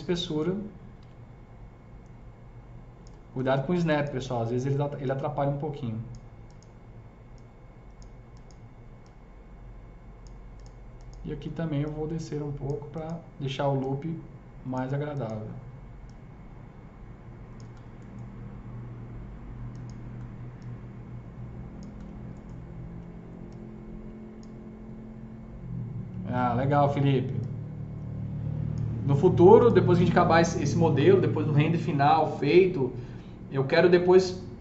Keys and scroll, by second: 0.9 s.